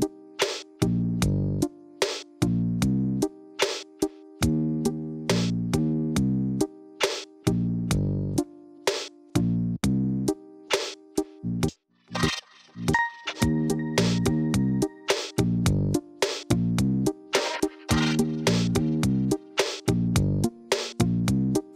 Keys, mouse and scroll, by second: 0.8 g, 2.2 s, 3.0 g, 4.3 click, 4.6-5.0 scroll down 2, 5.7 click, 6.1 click, 6.4 click, 6.9 shift+click, 7.7 shift+d, 8.7 shift+d, 9.9 middle click, 10.4 scroll up 1, 10.5-11.5 middle drag, 11.5 shift+click, 11.9 shift+click, 12.5 shift+click, 12.9 shift+click, 13.2 shift+drag, 13.8 shift+click, 14.1 shift+click, 14.5 shift+drag, 15.2 g, 17.8 scroll down 2, 18.1-19.2 middle drag, 19.2-20.5 scroll up 3, 20.5 click, 21.5 KP_1.